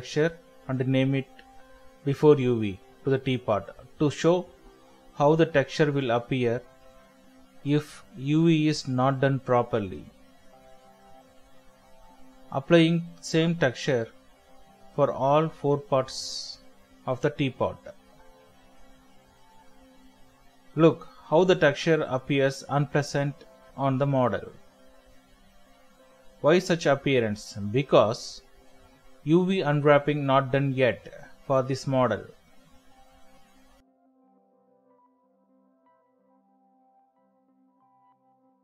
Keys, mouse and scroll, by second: 1.9 middle click, 4.7 double click, 6.2 scroll down 1, 6.5-6.8 scroll up 1, 7.7-8.1 scroll down 1, 11.6 middle click, 19.9 middle click, 23.6-24.1 typing, 29.5-30.3 typing, 29.5-35.4 ctrl+drag, 37.1-38.6 shift+drag, 37.2-37.8 typing.